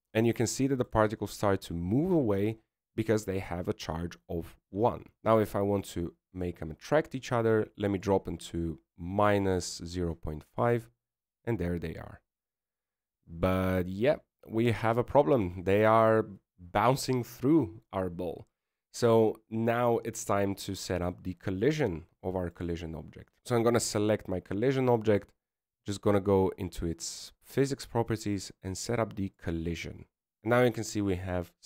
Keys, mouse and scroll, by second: 2.8 shift+middle click, 3.4 scroll down 4, 5.0 scroll up 1, 7.2 click, 12.4-14.7 scroll up 1, 14.7 scroll down 1, 14.8-15.5 scroll down 1, 23.4 right click, 27.2 click, 30.3 click.